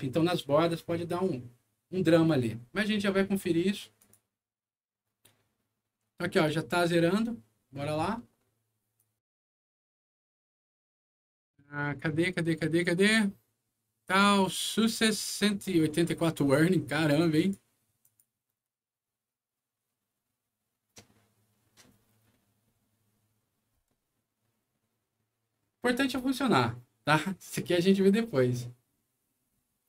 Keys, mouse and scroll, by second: 3.9 click, 8.9 click, 14.6-16.4 drag, 17.3 click, 17.9 click.